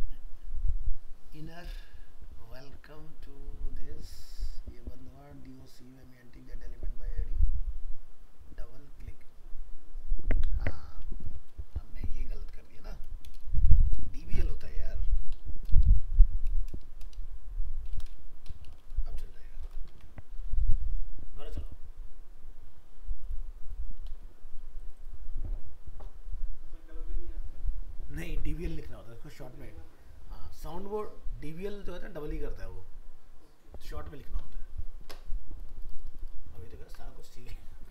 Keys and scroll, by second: 18.7 ctrl+s, 19.9 alt+Tab.